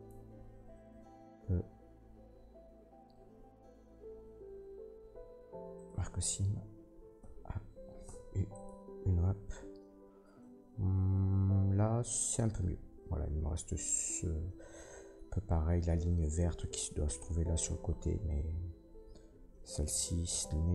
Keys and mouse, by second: 0.6 ctrl+e, 7.2 a, 8.0 u, 16.7-20.7 drag.